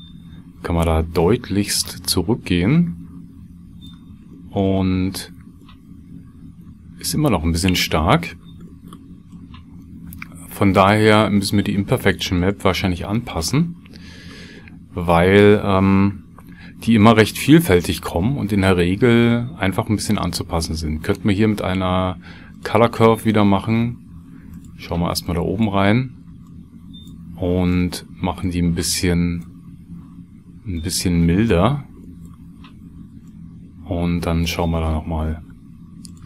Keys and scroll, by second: 16.4 shift+a.